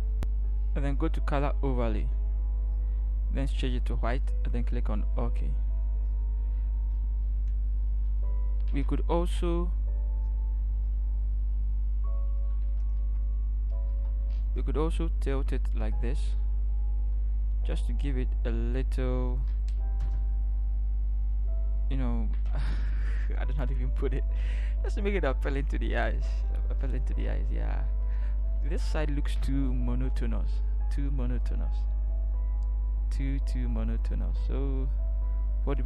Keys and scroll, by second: 14.1 F2, 24.5 ctrl+=.